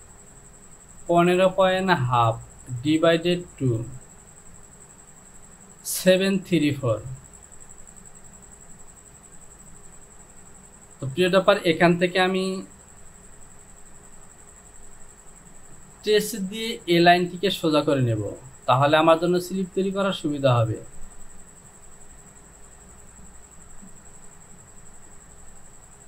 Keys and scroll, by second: 9.6 Return.